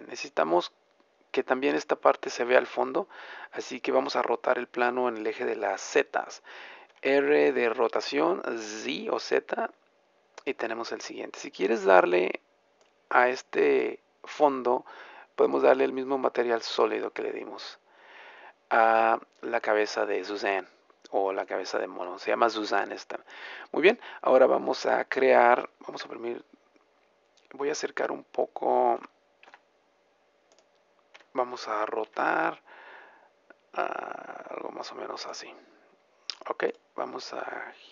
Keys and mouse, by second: 6.9 r, 10.5-12.4 drag, 15.4-17.2 drag, 17.4-25.9 middle drag, 26.0 KP_0, 29.0 g, 30.5 click, 31.2 r, 35.4-37.9 drag.